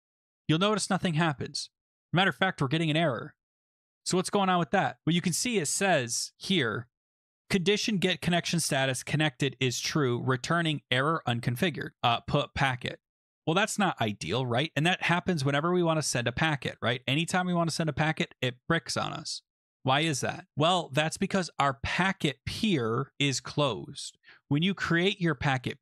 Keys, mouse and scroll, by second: 1.8 click, 1.8 click, 1.9 click, 2.0 click, 2.9 click, 3.6 click, 14.9 click, 15.5 click, 15.7 click, 15.8 click, 15.9 click, 16.1 click, 16.2 click, 17.2 click, 19.8 click, 20.2-20.5 scroll, 21.3 middle click, 23.2 click, 24.2 middle click, 24.2 middle click, 24.3-25.8 scroll.